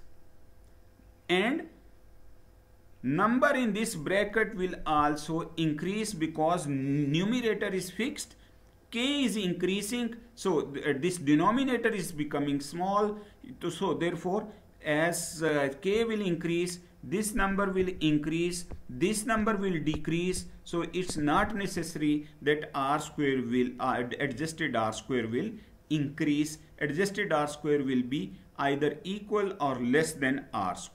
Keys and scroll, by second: 30.7 Down.